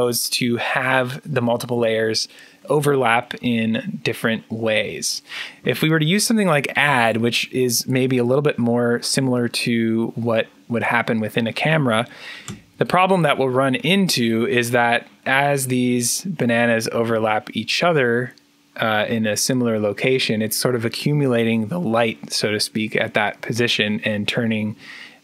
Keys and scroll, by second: 12.3-15.1 typing.